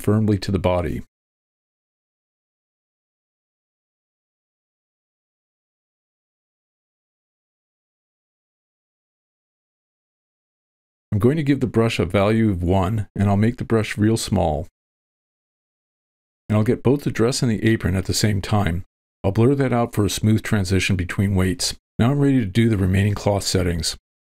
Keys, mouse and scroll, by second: 0.4 middle click, 0.4 v, 1.2-1.6 ctrl+middle drag, 8.0 click, 10.3-12.9 drag, 14.0 f, 14.6-17.6 drag, 17.9 click, 18.4 shift+space, 19.4 shift+space, 19.5 shift+space, 19.5 f, 19.6 click, 20.7 alt+h, 21.9 ctrl+middle click, 23.0-24.0 drag.